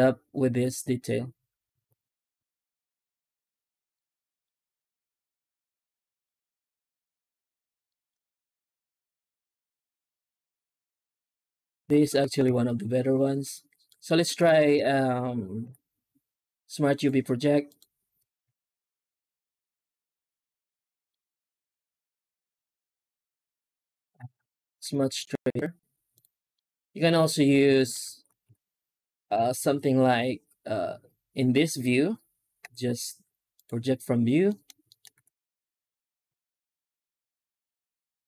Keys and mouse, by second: 5.9 middle drag, 7.7 shift+middle click, 11.0 z, 12.3 z, 13.8 middle click, 14.0 Tab, 14.3 alt+shift+z, 14.6 a, 15.5 u, 18.0 Tab, 18.3 z, 20.9 shift+middle click, 22.0 alt+shift+z, 24.7 z, 26.4-27.0 middle drag, 27.2 Tab, 27.6 shift+middle click, 28.0 alt+shift+z, 28.3 a, 29.2 u, 32.5 u, 34.2 Tab, 34.3 middle drag, 34.7 shift+middle drag, 35.1 z.